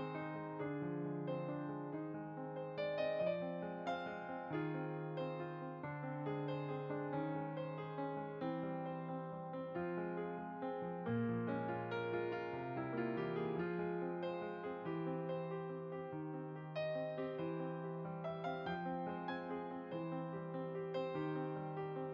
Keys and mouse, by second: 0.7 g, 2.0 click, 4.5-5.9 typing, 5.6 click, 8.1 click, 11.2 Tab, 12.4 click, 13.9 g, 15.1 click, 17.6 right click, 19.3 click, 21.9 right click.